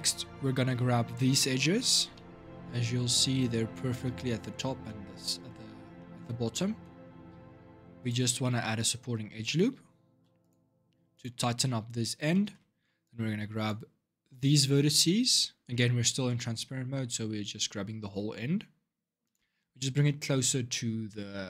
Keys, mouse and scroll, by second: 0.1-1.2 scroll down 1, 1.2-7.8 shift+middle drag, 7.8 click, 8.2 shift+middle click, 8.5-9.8 scroll up 4, 9.8 ctrl+r, 12.1 shift+middle click, 12.8-15.6 shift+drag, 15.6-18.6 middle drag, 19.0 click, 19.5-21.4 scroll up 2.